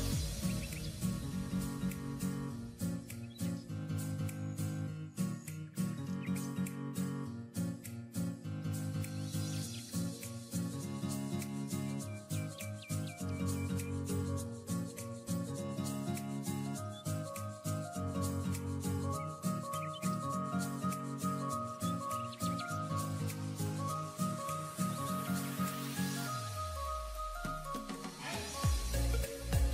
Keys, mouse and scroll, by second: 0.4 double click, 4.7-5.3 typing, 6.1 double click, 9.1-10.6 typing, 11.4 scroll up 1, 11.7 typing, 13.1 typing, 13.1 double click, 18.2 double click, 22.4 ], 22.5 ], 25.4 double click.